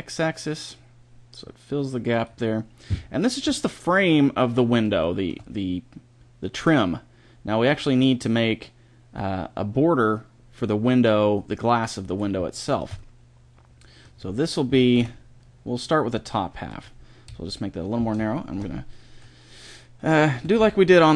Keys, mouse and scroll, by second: 4.8-6.8 middle drag, 12.4-13.9 middle drag, 14.6 s, 17.1 KP_1, 20.2 a, 20.4 b.